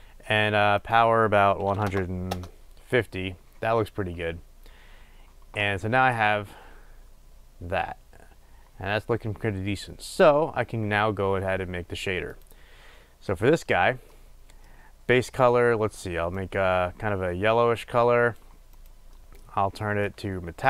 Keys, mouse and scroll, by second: 2.7 Return, 6.5 click, 9.1-12.7 drag, 20.3-20.6 drag.